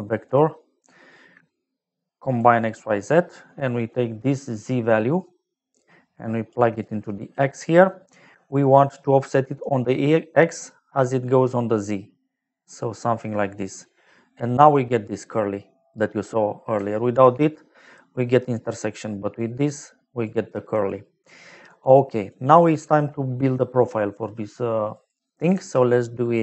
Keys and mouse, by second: 0.2 click, 2.3 click, 2.7 click, 5.7 click, 6.7 click, 11.5 click, 13.5 middle click, 16.9 ctrl+right click, 17.8 middle click, 19.3 click, 21.5 middle click, 22.2 click, 24.9 click, 25.5 shift+a.